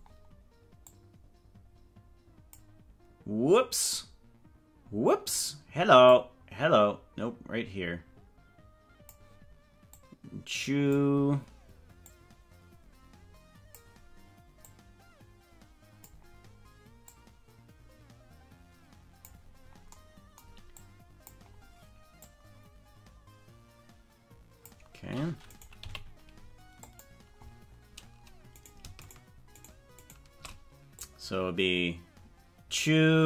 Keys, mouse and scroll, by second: 0.9-2.5 drag, 6.1-9.1 drag, 10.1-11.1 drag, 12.1-13.9 drag, 14.7-16.1 drag, 17.1-19.3 drag, 20.8 click, 22.2-24.8 drag, 25.5 right click, 25.8 g, 29.0 shift+right click, 29.8 shift+right click, 30.2 shift+right click, 31.0-33.2 drag.